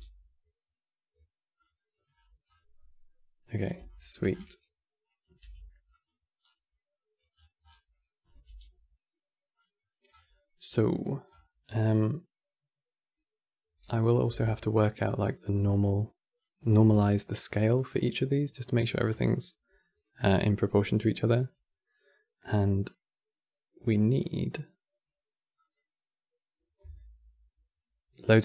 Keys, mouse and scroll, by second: 1.5 middle click, 1.8-2.5 scroll up 20, 2.5-3.6 middle drag, 3.6-4.0 ctrl+right drag, 4.1-4.6 scroll down 6, 4.8 click, 5.1 g, 6.1-6.6 scroll down 4, 6.7 middle click, 7.1-7.6 scroll down 12, 7.6-8.0 middle drag, 8.0 drag, 8.2 g, 9.5 middle click, 9.8 scroll up 11, 11.0-11.3 scroll up 10, 11.5-13.5 middle drag, 13.5 drag, 14.0 g, 15.1 click, 16.5 g, 22.5 click, 25.4 click, 28.2-28.4 drag.